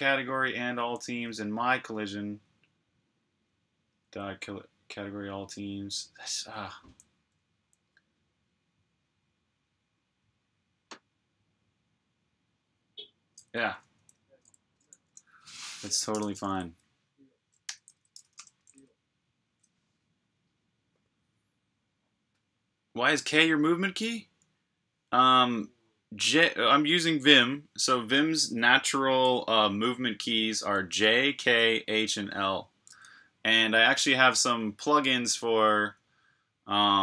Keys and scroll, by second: 0.7 j, 3.9 h, 6.8-7.6 typing, 16.1 g, 17.3-18.5 typing.